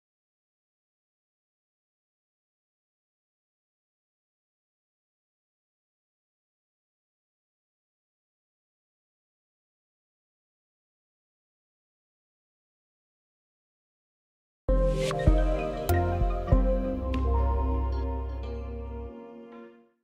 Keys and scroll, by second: 0.7 ctrl+c, 1.1 ctrl+v.